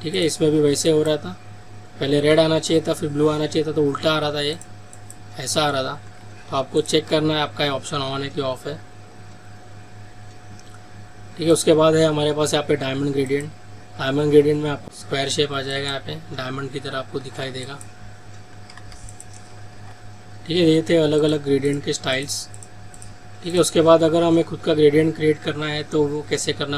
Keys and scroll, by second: 6.0 ctrl+z, 15.4 ctrl+z.